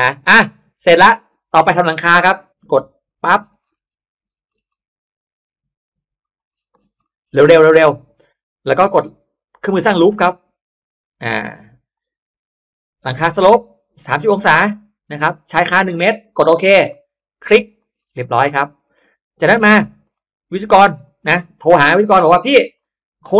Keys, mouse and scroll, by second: 0.1 middle click, 0.7 scroll up 1, 0.8 middle click, 0.9 scroll down 1, 1.3 scroll up 1, 1.9 scroll up 1, 2.3 r, 3.0 click, 3.2-3.9 scroll down 2, 4.2-5.0 scroll up 4, 6.1 click, 6.4-7.0 scroll down 1, 6.6 space, 6.9 middle click, 7.4 scroll up 1, 7.8 scroll down 1, 7.8 middle click, 9.4 click, 10.6 click, 11.8 click, 16.2 click, 16.8 middle click, 17.0 scroll up 1, 17.4 click, 17.8 scroll up 1, 18.1 middle click, 19.9 click, 20.9 click, 22.0 click.